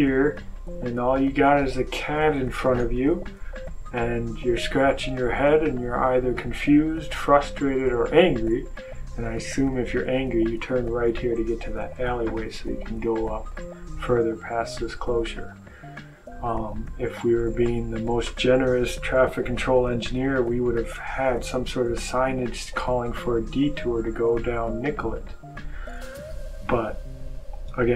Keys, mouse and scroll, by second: 15.3 click.